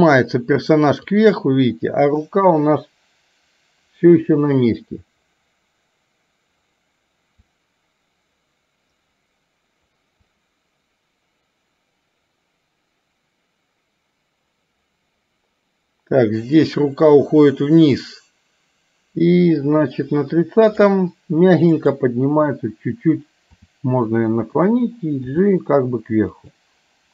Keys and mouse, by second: 1.2-21.0 drag, 21.7 click, 23.6 r, 25.2 g.